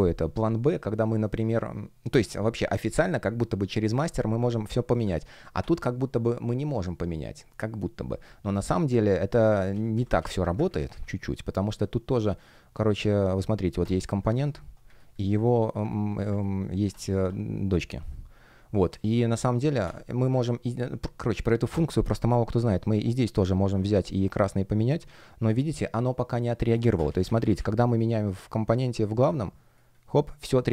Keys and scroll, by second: 9.4 super+z, 10.6 super+z, 14.3 BackSpace, 27.0 super+z.